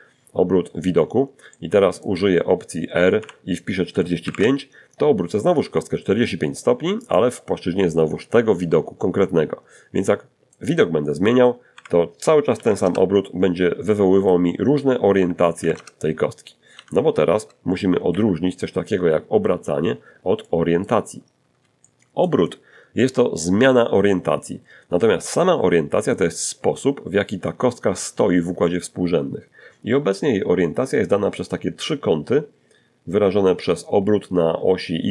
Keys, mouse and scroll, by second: 1.5 r, 2.4 4, 5.2 click, 8.1 middle click, 9.9-11.5 typing, 12.1 middle click, 13.1-15.0 typing, 16.3 alt+r, 17.6-18.2 scroll up 2, 18.6 shift+middle click, 20.0 shift+middle click.